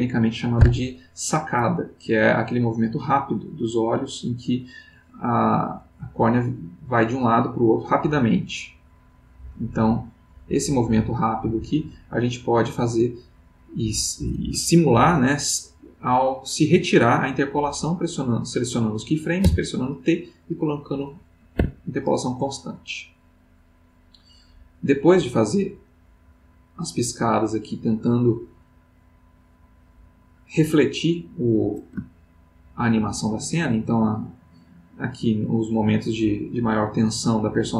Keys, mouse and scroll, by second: 1.4-5.7 drag, 7.1 click, 18.4-19.1 drag, 19.4 t, 21.5 Escape, 22.4-31.3 drag, 32.1-33.2 ctrl+middle drag, 33.8-37.7 drag.